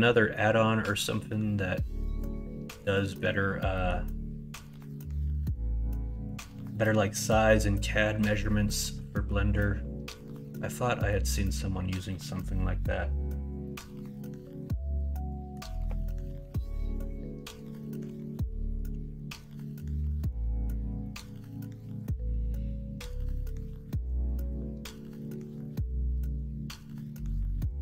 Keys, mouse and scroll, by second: 0.1 middle click, 1.0 middle click, 2.0 middle click, 3.0 middle click, 3.7 middle click, 4.5 middle click, 8.6 middle click, 9.2 middle click, 10.3 middle click, 11.1 middle click, 13.9-15.5 middle drag, 16.1 KP_1, 16.5 KP_Enter, 17.5 KP_3, 18.0 alt+z, 19.1 shift+middle click.